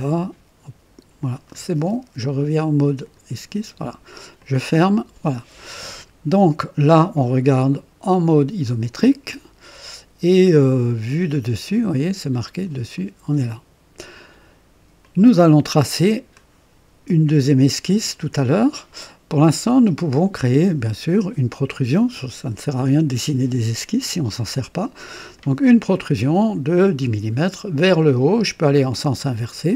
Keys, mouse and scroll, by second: 2.9 click, 4.4 click, 6.4-6.8 scroll down 1, 8.6 click, 12.4 click, 15.0-16.6 drag, 20.4 click, 25.3 click, 28.6 click.